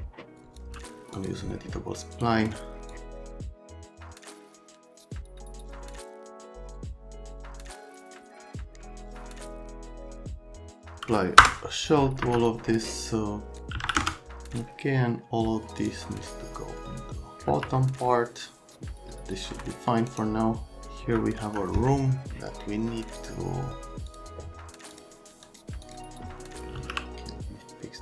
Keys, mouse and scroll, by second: 0.3 click, 0.4-1.2 typing, 0.5 click, 1.1 click, 2.1 click, 2.9 click, 3.3 click, 3.6 right click, 3.8 shift+middle click, 4.7 right click, 4.8 middle click, 4.9 right click, 5.1 shift+click, 5.6 scroll down 1, 5.9 shift+click, 6.3 click, 6.7 right click, 7.1 click, 7.4 ctrl+z, 7.6 shift+click, 8.5 F3, 8.6 middle click, 9.0 middle click, 9.1 middle click, 9.3 middle click, 9.4 F3, 9.5 click, 9.7 middle click, 9.9 click, 10.5 click, 11.4 Return, 12.2 F3, 13.7 KP_2, 13.8 KP_0, 14.0 KP_Enter, 15.7 click, 17.4 F3, 18.0-19.2 alt+middle drag, 19.2-19.9 scroll down 2, 20.1 scroll up 1, 21.0 F3, 21.4 F3, 23.2 click, 24.1 click, 24.9 click, 25.4 click, 25.8 click, 26.4-27.3 typing.